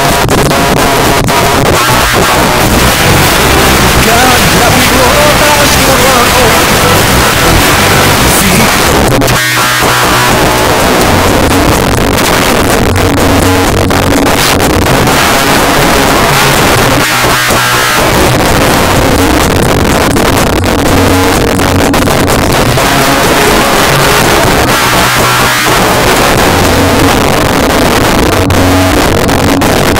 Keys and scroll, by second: 8.6 Page_Down.